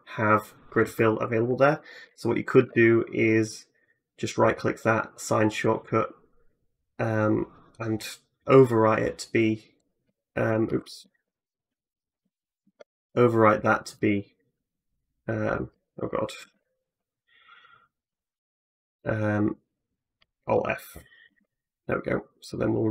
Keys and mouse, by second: 2.4 ctrl+f, 12.4 ctrl+f, 16.2 ctrl+f, 19.2-20.4 drag, 21.3-22.9 drag.